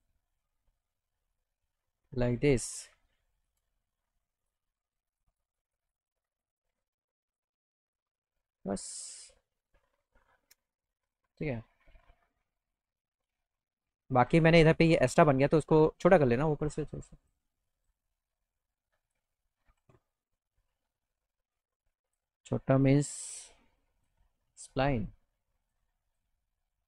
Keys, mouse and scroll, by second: 1.4 shift+click, 4.4 click, 5.1 click, 5.3 click, 5.5 click, 5.7 click, 5.9 click, 6.0 click, 6.2 click, 6.4 click, 6.5 click, 6.7 click, 7.3 click, 11.3 alt+middle click, 12.6 middle click, 13.0 right click, 13.3 right click, 13.7 right click, 15.0 click, 17.3 click, 17.7 click, 19.0 alt+click, 19.6 alt+middle click, 22.1 click, 23.0 e, 24.0 click, 25.7 click, 26.1 click.